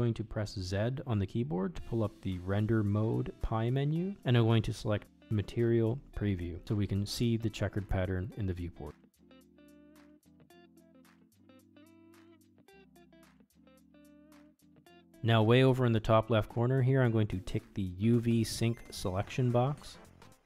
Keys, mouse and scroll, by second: 1.3 z, 7.8 Tab, 9.3-10.0 middle drag, 10.5-12.3 middle drag, 12.6 Tab, 14.9 middle click.